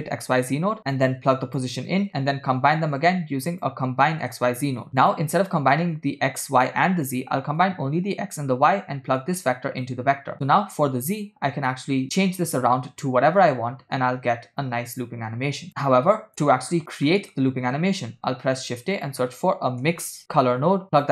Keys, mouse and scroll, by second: 0.8-1.7 drag, 2.9 shift+a, 6.5-7.2 drag, 7.6-8.5 drag, 9.3-9.9 drag, 10.3-16.3 drag, 15.7-16.3 scroll down 4, 16.8 scroll up 2, 17.2 middle click, 18.1 shift+a.